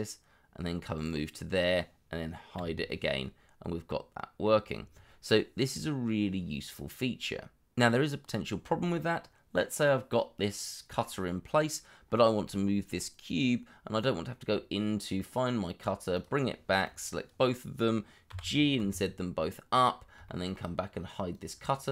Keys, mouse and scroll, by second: 2.5 h, 3.2 middle click, 18.2 g, 18.7 z, 20.2 shift+middle click.